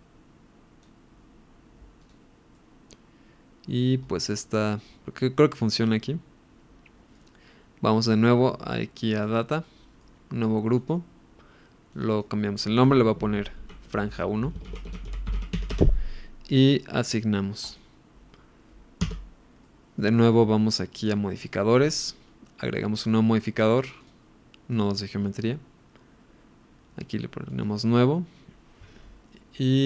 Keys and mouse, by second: 2.0 click, 2.5-3.7 middle drag, 4.3-7.1 middle drag, 9.6 middle click, 10.7 click, 11.9-15.7 drag, 17.6 click, 19.0 Tab, 19.6-19.9 middle drag, 21.3 click, 22.8 click, 24.0-24.8 drag, 27.5 click.